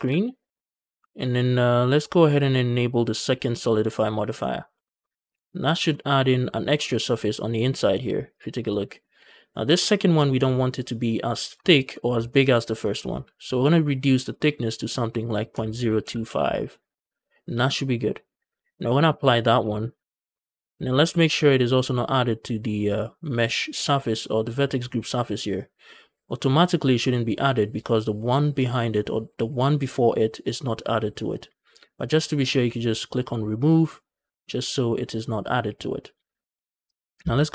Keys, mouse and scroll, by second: 3.7 click, 4.2-4.5 middle drag, 4.7 shift+middle click, 4.9 scroll up 2, 5.2 middle drag, 5.6 shift+middle drag, 5.8 scroll up 1, 6.0 middle drag, 6.4-8.2 scroll up 1, 8.2 click, 8.5 click, 9.6-10.0 shift+middle drag, 10.3-11.1 ctrl+middle drag, 11.5 shift+middle click, 12.1 ctrl+middle click, 14.1-16.8 drag, 19.4 ctrl+a, 20.2 middle click, 20.5 Tab, 20.7 a, 20.8 a, 21.2 alt+click, 22.7 click, 33.4 click, 33.6 click, 36.7 click.